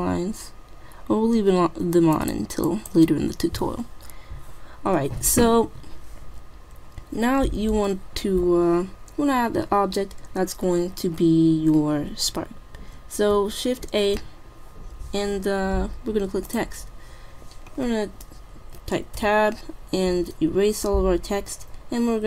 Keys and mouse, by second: 2.1-4.2 drag, 13.9 shift+a, 19.2 Tab, 20.8-21.7 BackSpace.